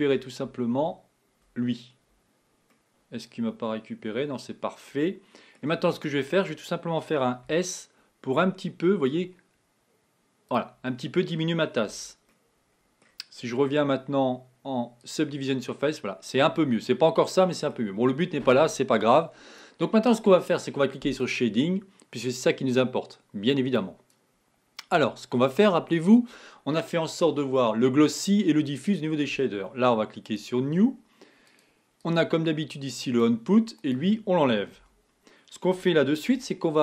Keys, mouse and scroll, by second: 0.5 ctrl+KP_Add, 0.8 ctrl+KP_Add, 2.7-6.0 middle drag, 6.0-6.4 scroll up 1, 7.7 s, 11.0 middle click, 11.7 scroll down 4, 11.9 Tab, 12.4-15.1 middle drag, 15.1 click, 15.7-18.4 middle drag, 18.4-19.3 scroll down 1, 21.6 scroll down 1, 21.7 click, 24.4 click, 25.1 click, 30.5 click, 31.3 click, 33.8 click, 34.8 x.